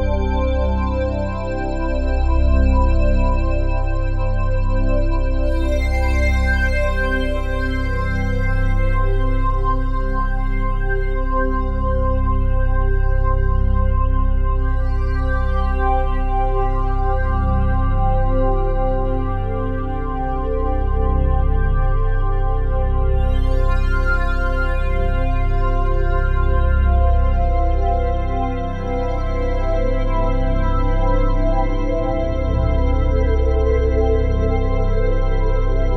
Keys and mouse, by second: 1.7 click, 2.6 click, 3.2 click, 3.9-4.7 typing, 4.7-5.9 ctrl+alt+drag, 7.9-9.5 drag, 9.5 right click, 11.2 click, 12.8 click, 13.3 click, 14.1 middle click, 15.4 click, 16.3-17.9 alt+drag, 18.3 1, 19.8 click, 21.8 shift+s, 22.6 click, 24.5 click, 26.0 click, 27.0 click, 27.2 click, 28.1-30.1 typing, 31.3-33.1 typing, 33.8 click, 34.8 click.